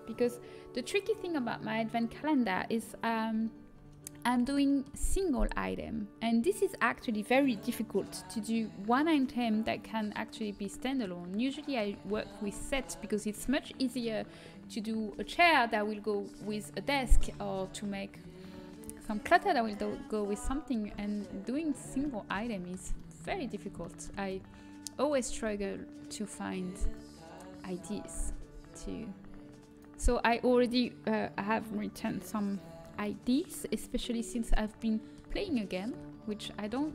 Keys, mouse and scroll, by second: 3.7-6.3 middle drag, 10.3-17.7 middle drag, 20.4-22.4 middle drag, 25.0-27.7 right drag, 25.4 g, 27.8-29.6 drag, 28.3 g, 29.9 middle click, 34.3-36.9 middle drag.